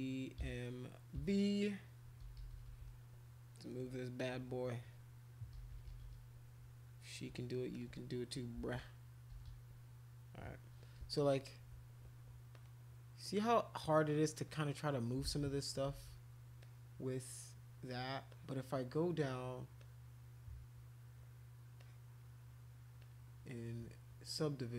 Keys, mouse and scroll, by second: 0.4 m, 1.2 v, 2.2-2.8 typing, 4.2 click, 5.6-6.1 typing, 7.7 click, 8.6 ctrl+z, 9.4 ], 12.5-13.6 drag, 14.8 click, 15.2 ctrl+z, 15.9 ctrl+z, 16.6 click, 18.3 click, 19.3 click, 19.8 click, 21.8 click, 23.0 click.